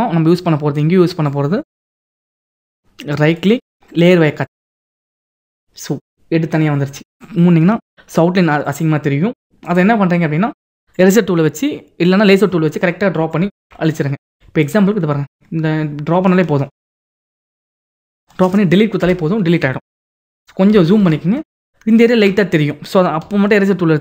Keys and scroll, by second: 19.9 ctrl+d, 23.2 e.